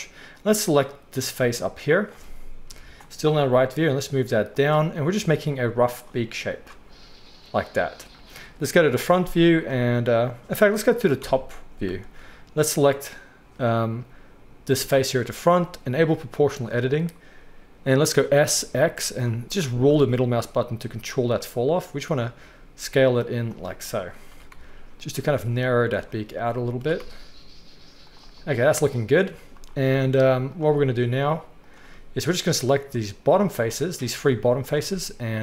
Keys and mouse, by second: 0.4-4.6 drag, 2.6 KP_3, 3.5 g, 4.6 middle click, 4.9-6.0 drag, 5.3 g, 6.0 middle click, 6.5-7.8 drag, 6.7 g, 8.7 KP_1, 11.2-12.7 middle drag, 11.2 KP_7, 12.7-16.4 drag, 16.4-30.5 middle drag, 18.2 s, 24.3 s, 26.8 s, 29.3 z, 30.5 click, 30.5-31.7 middle drag, 31.7-32.7 drag, 32.7-34.6 middle drag, 34.6 shift+click, 34.7-35.4 shift+middle drag.